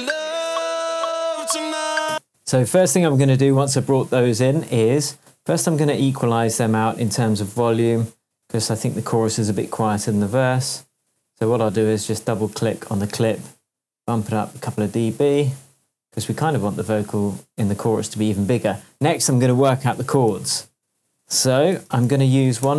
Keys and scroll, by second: 2.1 space, 2.4 shift+Tab, 9.3 super+e, 15.5 shift+Tab, 20.3 shift+super+t, 21.5 shift+super+r, 21.8-22.7 typing.